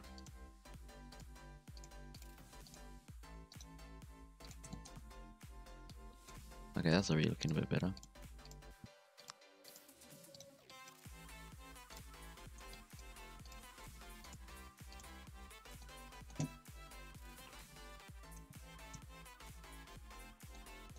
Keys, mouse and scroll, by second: 0.0-3.7 typing, 3.5 right click, 4.7 shift+middle click, 5.0 z, 5.7 1, 5.9-7.0 drag, 7.0-9.8 typing, 10.6 click, 11.0 g, 12.4 alt+a, 12.7 click, 13.1 r, 13.5 z, 13.9 g, 14.6 g, 15.1 Tab, 15.2 scroll down 1, 15.3-15.8 middle drag, 15.8 scroll up 2, 16.0-16.7 middle drag, 16.7 KP_3, 17.6 Tab, 17.8 z, 18.2 alt+a, 18.8-19.3 scroll up 2, 19.3 z, 19.6 Tab, 19.7-20.6 middle drag, 20.6 scroll down 1, 20.7-20.9 middle drag.